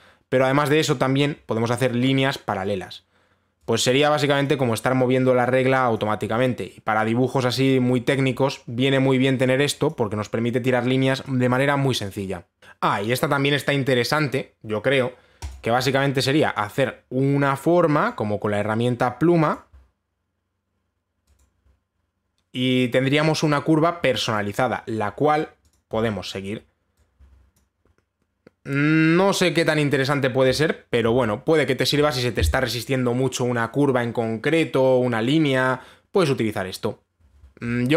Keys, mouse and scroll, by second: 0.1 click, 2.4 click, 5.0 click, 6.5 click, 8.7 click, 10.5 click, 12.6 click, 12.6 scroll down 2, 12.8 click, 16.1 click, 18.7 click, 20.2 click, 22.0 click, 26.3 click, 28.2 click, 31.6 ctrl+z.